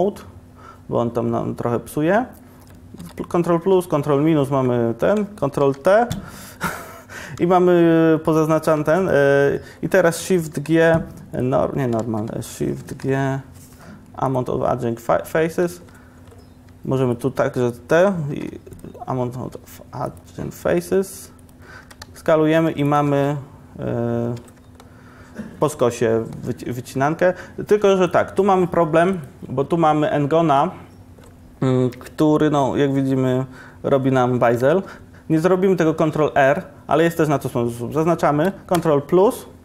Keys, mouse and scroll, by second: 3.7 ctrl+KP_Add, 6.3 ctrl+t, 8.7 1, 10.6 shift+g, 12.1 ctrl+z, 13.0 shift+g, 21.9 s, 23.1 Tab, 26.9 Tab, 34.8 ctrl+r, 38.9 ctrl+KP_Add.